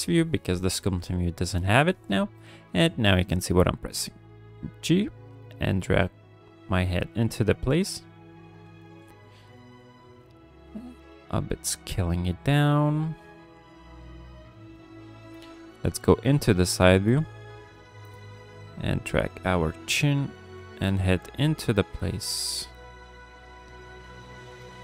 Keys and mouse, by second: 0.0 n, 0.6 n, 2.3 ctrl+click, 3.2 g, 3.4 f, 4.8-6.6 drag, 6.8 f, 7.4-8.4 drag, 8.6 f, 9.2 click, 9.9 click, 10.3 click, 10.8 click, 11.3 click, 11.8 click, 12.2 click, 12.5 click, 12.8 click, 13.2 click, 13.4 click, 13.8 click, 14.3 click, 14.7 click, 16.1 KP_3, 17.0 f, 18.2-20.3 drag, 20.5 f, 21.4 f, 21.8 click, 22.2 click, 22.8 click, 23.6 click, 24.6 f.